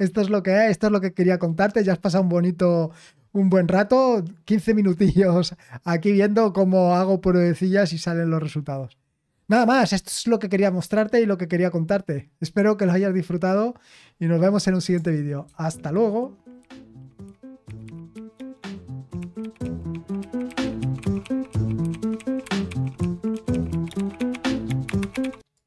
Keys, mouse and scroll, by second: 15.4 super+x, 25.5 click.